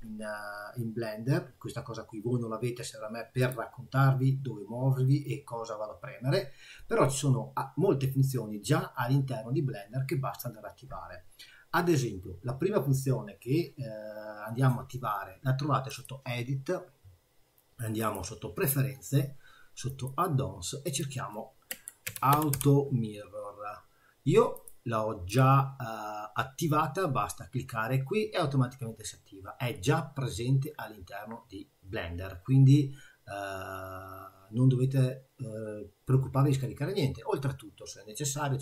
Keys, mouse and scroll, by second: 3.4 click, 15.9 click.